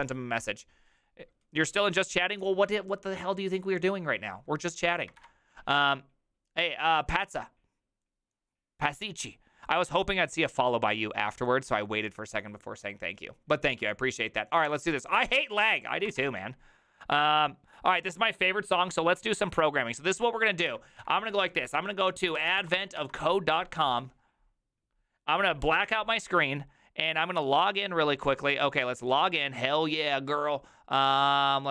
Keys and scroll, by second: 5.2 alt+f, 16.2 alt+f, 20.7 alt+f, 21.0 ctrl+t, 22.1-23.4 typing.